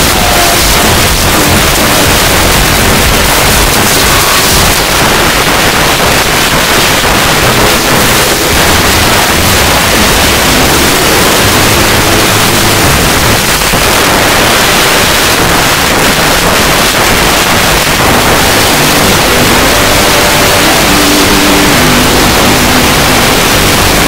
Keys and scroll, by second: 4.7 Page_Down, 13.4 Page_Down, 24.0 space.